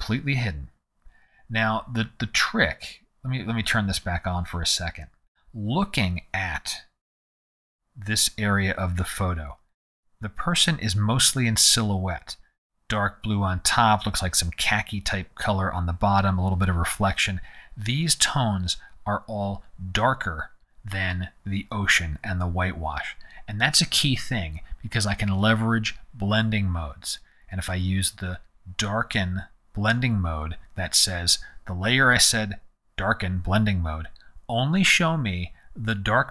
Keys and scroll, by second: 7.0 z.